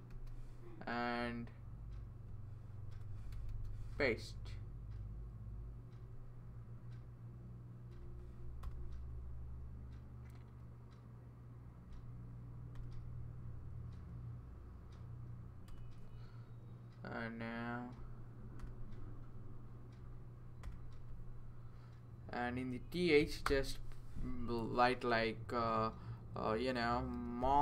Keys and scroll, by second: 0.1 super+c, 2.9 Return, 3.5 super+v, 8.6 Return, 12.8 Return, 15.7 Return, 18.6 Return, 20.6 Return, 23.5 space, 27.2-27.6 typing.